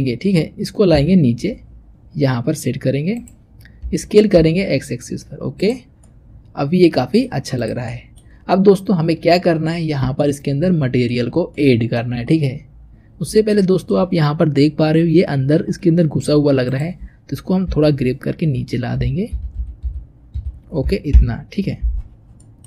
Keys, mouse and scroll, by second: 0.8 g, 3.7 s, 5.9 scroll down 1, 5.9-7.4 middle drag, 7.4 click, 7.7-12.8 middle drag, 12.8 scroll up 2, 13.4-16.3 shift+middle drag, 16.5 click, 17.5 g, 22.0-22.3 scroll down 3, 22.3-22.6 middle drag.